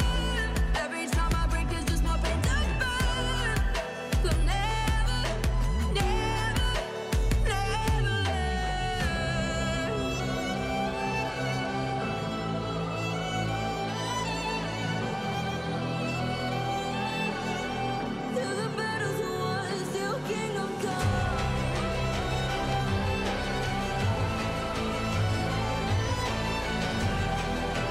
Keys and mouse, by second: 0.0 KP_0, 1.0-2.1 drag, 2.2 click, 2.7 click, 3.9 middle click, 4.5-7.1 typing, 10.0 KP_7, 11.3-12.4 typing, 14.2 KP_1, 14.9 middle click, 15.3 s, 15.9 y, 15.9 y, 16.0 y, 16.3-17.6 drag, 19.2 click, 20.9-22.3 typing, 24.0 y, 24.1 y, 24.1 y, 24.3 middle click, 24.9 click, 25.4-26.2 middle drag, 26.2-27.9 right drag.